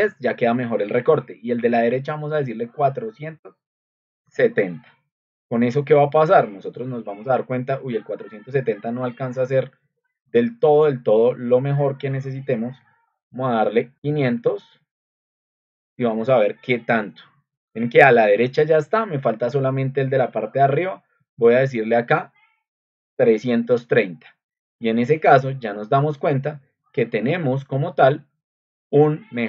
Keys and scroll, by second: 4.0-4.8 typing, 13.7-14.6 typing, 23.1-23.5 3.